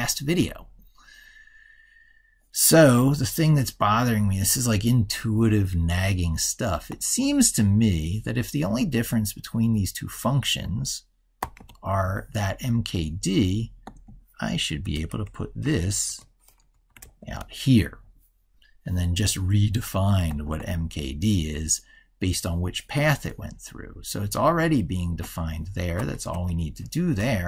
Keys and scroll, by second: 11.3 ctrl+x, 16.8 ctrl+v, 27.1 ctrl+Left.